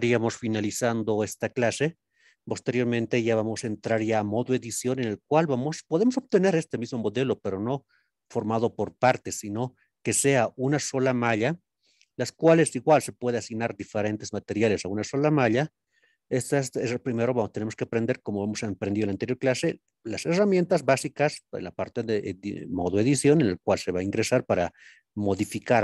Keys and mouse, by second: 6.3-7.4 middle drag, 7.7 click, 8.2 click, 10.1 click, 16.7-17.2 middle drag, 17.7-18.2 shift+middle drag.